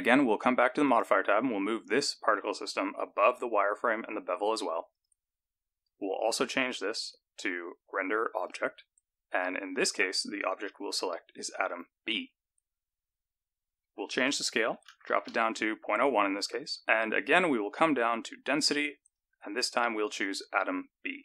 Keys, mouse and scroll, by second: 0.9 click, 3.2 click, 4.9 click, 6.7 click, 10.5 click, 14.1 click, 17.0-17.7 scroll down 6, 17.7-19.1 scroll down 1, 19.1 click, 19.1-20.7 scroll down 1.